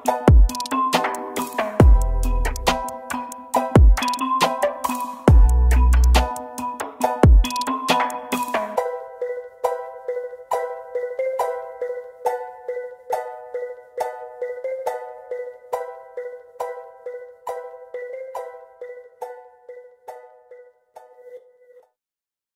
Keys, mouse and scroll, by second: 2.1 F4, 3.6 shift+F4, 6.3 z, 9.6 double click, 10.9 right click, 11.8 Down, 12.2 Down, 12.8 double click, 14.6 typing, 16.9 typing, 17.2 ctrl+space.